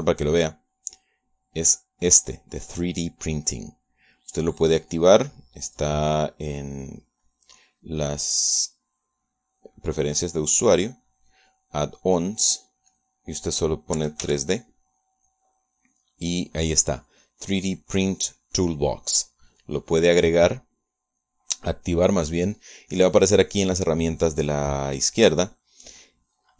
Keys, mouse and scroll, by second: 0.1 click, 0.6 click, 3.5 click, 6.5-7.1 scroll up 1, 7.1 scroll down 1, 7.1 scroll up 1, 8.5 click, 9.5 click, 11.8 click, 14.1 click, 15.2 3, 15.5 d, 21.9 click.